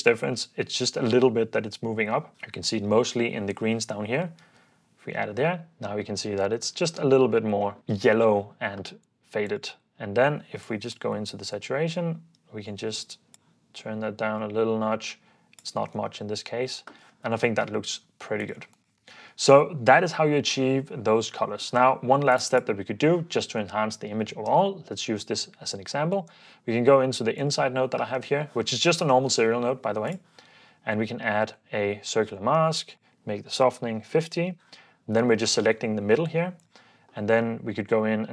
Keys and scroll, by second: 0.4 ↺, 0.6 super+d, 2.3 super+f, 4.5 super+d, 16.0 super+d, 33.4-34.8 typing, 36.0 h.